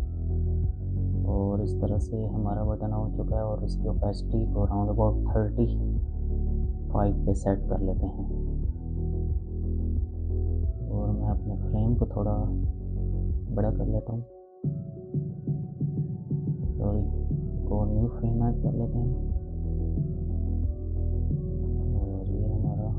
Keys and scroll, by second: 4.8-6.7 typing, 7.5 Return, 15.6 ctrl+z, 18.3 f.